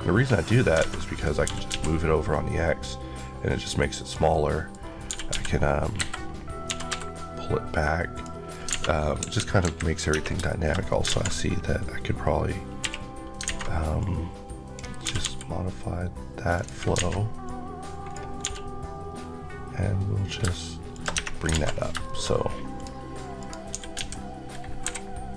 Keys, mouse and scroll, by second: 0.1-0.7 scroll up 2, 0.7 alt+a, 1.0 click, 1.6 typing, 3.9 click, 4.2 middle click, 4.7 scroll down 1, 4.9 typing, 5.8 Escape, 6.5 typing, 8.0 click, 8.3 scroll down 2, 8.6 alt+a, 9.1 KP_1, 9.5 KP_3, 10.0 Tab, 10.3 middle click, 10.6 scroll up 1, 10.9 alt+z, 11.4-12.3 scroll up 1, 12.3-12.7 scroll up 1, 12.7 1, 13.5 a, 13.8 click, 14.9 typing, 16.4 click, 16.8 alt+a, 17.3 click, 18.3 click, 18.3 g, 20.3 shift+g, 20.8 shift+click, 21.0 Tab, 21.3-21.7 scroll down 3, 21.4 alt+z, 22.0 shift+middle click, 22.2 scroll up 1, 22.7 click, 23.3 click, 23.6-24.7 typing.